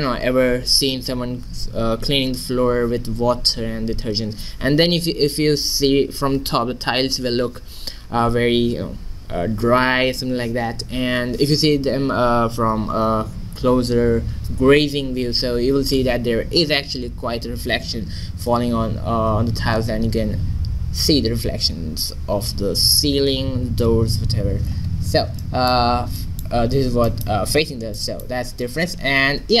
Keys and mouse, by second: 24.9-26.0 middle drag.